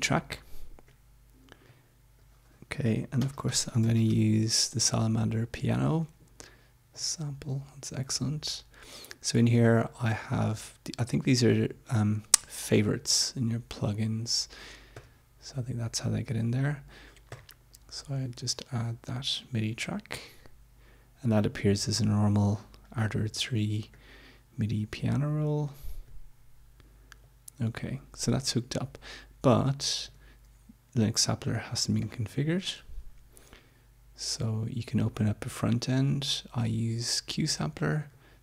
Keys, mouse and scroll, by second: 0.0 click, 1.6 click, 2.9-4.3 typing, 6.9 click, 14.9 click, 17.3 click, 22.2-24.1 drag, 25.1-26.2 drag, 27.1 click, 30.1 click, 32.0 click, 37.9 right click.